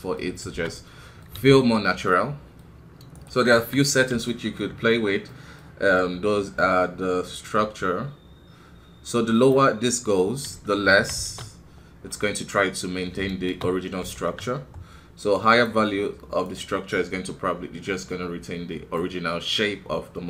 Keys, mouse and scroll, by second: 0.5 shift+space, 0.7 middle click, 1.3 KP_1, 1.7-2.1 scroll down 1, 2.1 middle click, 2.7-3.1 scroll up 2, 3.1 right click, 3.5 KP_1, 4.2-11.0 shift+middle drag, 11.0 shift+Left, 11.1 shift+space, 12.1-13.4 middle drag, 13.4 shift+space, 14.0 shift+Left, 15.4-18.5 drag, 18.9-20.2 middle drag.